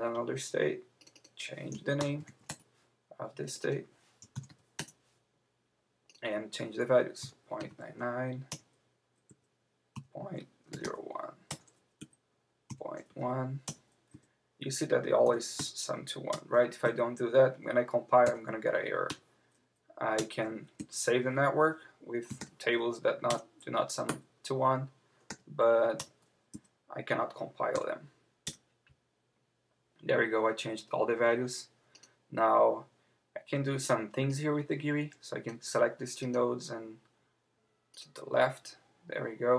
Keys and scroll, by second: 2.5 Return, 7.2 Return, 8.5 Return, 9.3 Down, 11.5 Return, 12.0 Right, 13.6 Return, 14.1 Up, 16.3 Return, 16.8 Right, 20.2 Return, 20.8 Down, 23.3 Return, 24.1 Right, 26.0 Return, 26.5 Up, 28.4 Return.